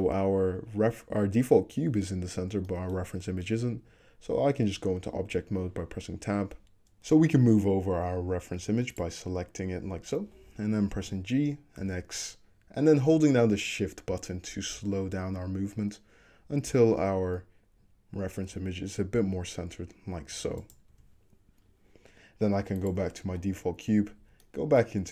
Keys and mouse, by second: 3.7 Tab, 9.0 click, 9.1-11.8 middle drag, 11.0 g, 21.0 Tab, 22.9-23.4 drag, 23.9 Tab, 24.3-24.9 shift+middle drag.